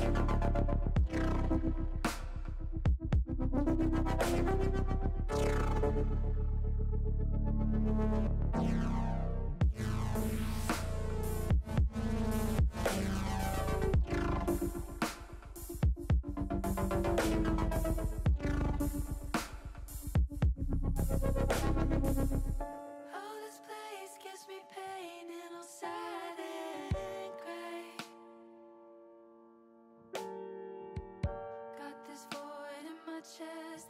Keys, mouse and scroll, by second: 1.2 click, 7.6 ctrl+r, 11.3 click, 12.1 ctrl+r, 16.3 click, 17.7 ctrl+r, 22.3 click, 26.4 click, 28.0 click, 28.7 click, 31.2 ctrl+z, 32.5-33.8 drag.